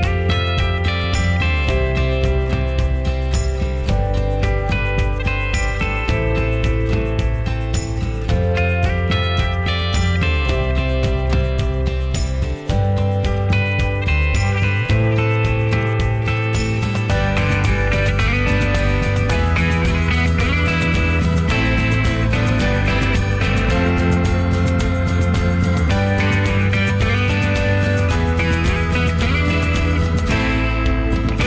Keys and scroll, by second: 0.5 Escape, 5.4 Escape, 6.6 l, 8.3-9.2 typing, 11.2 p, 12.3 ctrl+g, 15.7 Escape, 16.2-18.0 typing, 18.3 Escape, 20.1 p, 21.1 p, 22.1 Escape, 23.7 m.